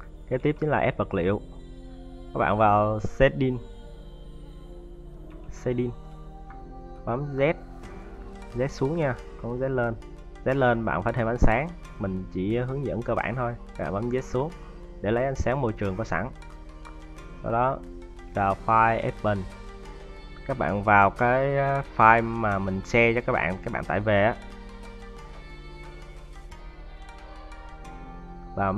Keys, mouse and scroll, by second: 0.1 `.